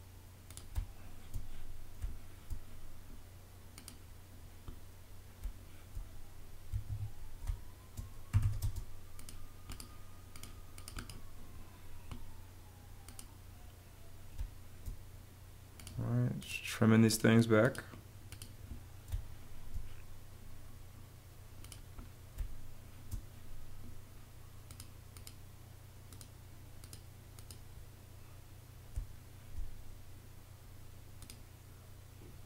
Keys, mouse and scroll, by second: 0.6 space, 2.0 space, 5.3 space, 6.8 Escape, 7.3-8.8 typing, 14.2 space, 19.0 space, 22.2 space, 28.8 space.